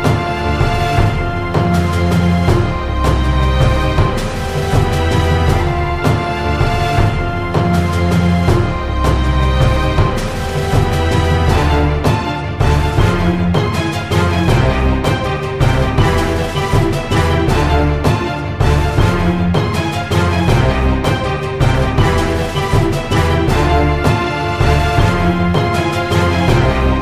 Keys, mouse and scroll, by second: 1.5 KP_1, 2.4 ctrl+r, 3.7 middle click, 4.0 ctrl+r, 5.0 ctrl+b, 6.3-7.8 drag, 7.8 s, 8.7 click, 9.1 e, 10.7 Tab, 10.8 Tab, 11.2 ctrl+r, 11.8 ctrl+r, 12.7 Tab, 13.1-14.2 middle drag, 13.7 Tab, 13.9 Tab, 14.2 KP_1, 16.6 middle click, 17.3 right click, 17.5-19.3 drag, 19.4 click, 19.7 Tab, 20.5 click, 21.0 click, 21.6 x, 22.3 click, 23.5 click, 23.9 ctrl+z, 24.2 click, 24.9 middle click, 25.7-27.0 drag, 26.0 Tab.